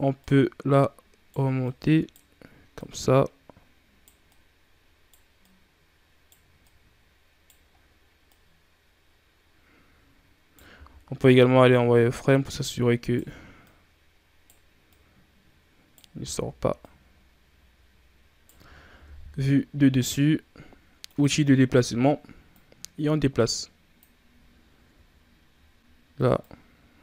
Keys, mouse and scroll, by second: 0.0 right click, 1.5 right click, 2.6 right click, 4.1 right click, 5.3 right click, 6.5 right click, 7.6 scroll up 1, 8.2 right click, 10.6 z, 11.2 right click, 13.5 right click, 14.8 right click, 16.0 z, 16.6 right click, 18.9 KP_1, 20.9-24.7 drag, 24.7 KP_3, 26.3-27.0 drag.